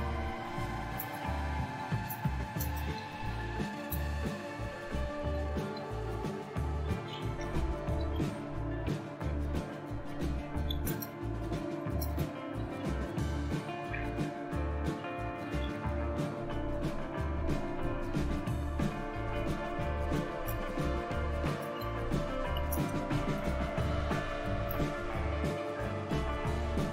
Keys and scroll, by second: 0.0-16.1 typing, 8.8 Return, 19.7-26.9 typing.